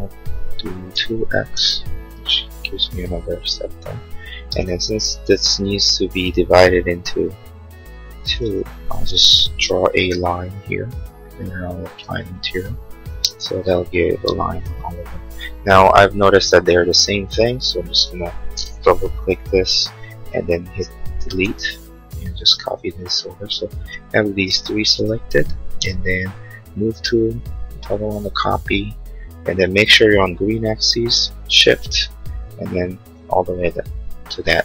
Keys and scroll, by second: 0.9 2, 1.3 x, 1.7 Return, 4.4 space, 9.6 l, 13.4 Escape, 20.8 Delete, 25.8 m.